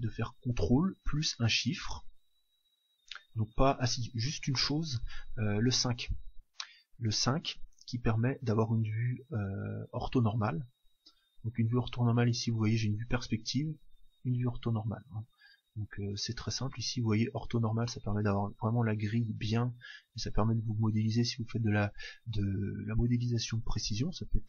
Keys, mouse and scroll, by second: 7.8 KP_5, 10.7 KP_5, 11.9 KP_5, 13.8 KP_5, 15.7 KP_1.